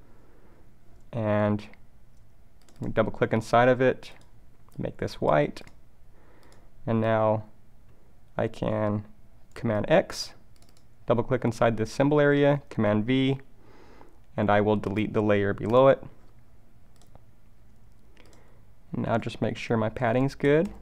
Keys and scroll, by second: 9.9 super+x, 12.4 super+v, 20.1 alt+Left.